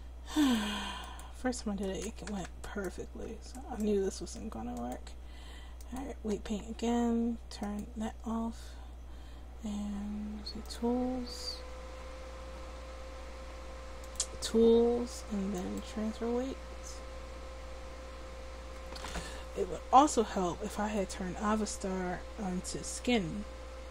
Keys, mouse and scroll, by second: 6.0 click, 7.6-9.3 drag, 10.7-18.3 drag, 21.0-23.9 drag.